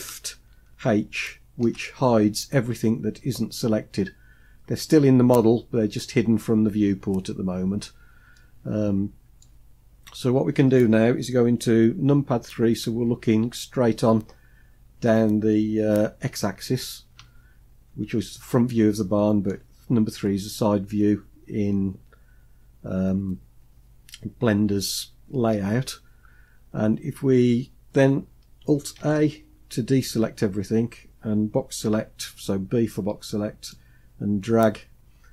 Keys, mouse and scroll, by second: 1.2 shift+h, 1.9 shift+h, 6.5 scroll up 1, 7.2-8.0 scroll down 1, 8.0-9.5 middle drag, 8.0 scroll down 1, 12.4 KP_3, 16.7-17.5 scroll up 2, 17.5 scroll up 1, 18.3 shift+middle click, 24.3-24.7 scroll up 1, 28.6 alt+a, 31.5 b.